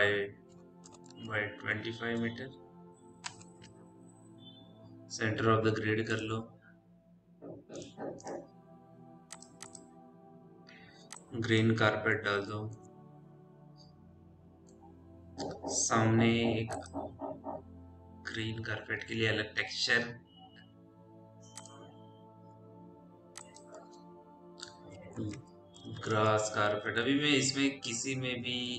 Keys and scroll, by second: 0.0-1.8 typing, 1.0 Tab, 3.1 Return, 18.3 m, 24.8-28.7 typing.